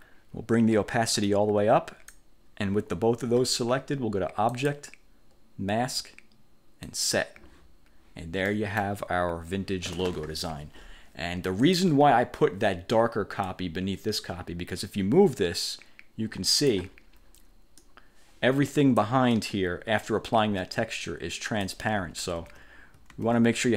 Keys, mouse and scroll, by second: 1.4 click, 4.7 click, 7.0 click, 8.6 middle click, 9.0 click, 11.7 click, 13.6-17.0 drag, 17.9-19.3 drag, 19.5-21.9 drag, 22.1 ctrl+z, 23.3 ctrl+z.